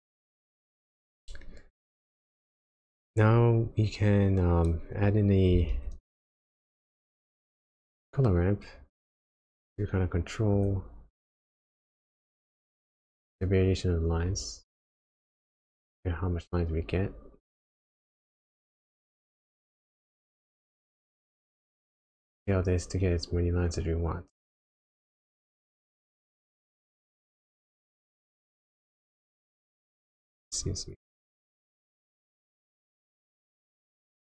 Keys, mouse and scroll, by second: 2.4 click, 5.7 shift+a, 11.5 click, 14.2 click, 19.5-20.3 scroll up 4, 20.3 middle click, 20.7-21.3 scroll up 3, 21.6 click, 30.9 click.